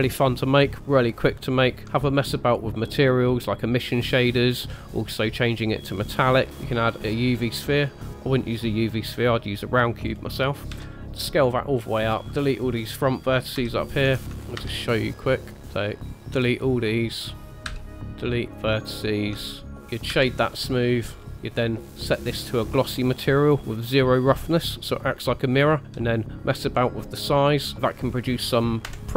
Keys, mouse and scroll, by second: 1.8 KP_0, 5.3 click, 6.5 shift+a, 6.8 scroll down 1, 7.3 scroll up 3, 10.0-10.5 scroll down 3, 10.7 s, 12.3 Tab, 12.3 q, 13.5 KP_7, 14.0-14.3 scroll down 1, 14.6 shift+middle click, 14.6 1, 15.6 click, 15.6 shift+middle click, 15.6 scroll up 2, 15.7 click, 17.7 x, 18.9-19.3 scroll up 3, 19.5 shift+middle click, 20.1 Tab, 20.1 middle click, 20.1 z, 21.2 scroll down 2, 21.3 click, 21.3 middle click, 25.8 s, 27.8 shift+middle click, 27.8-28.1 scroll up 3, 28.9 KP_0.